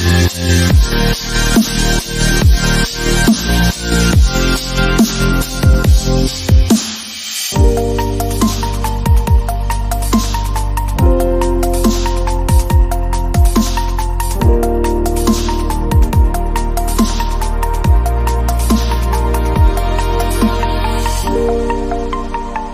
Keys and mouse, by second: 0.0-1.7 typing, 2.2 Tab, 3.1 a, 3.2 Tab, 3.2 a, 3.4 click, 3.6 KP_1, 4.0 click, 4.5-5.5 drag, 6.1-7.1 drag, 7.5 a, 7.7-8.9 drag, 8.4 Tab, 10.9 click, 11.6 Tab, 12.7 Tab, 13.1 shift+a, 15.1 r, 15.5 click, 15.8 click, 16.5 r, 18.0 KP_1, 18.1 KP_1, 20.3 ctrl+Tab, 21.1-22.7 typing.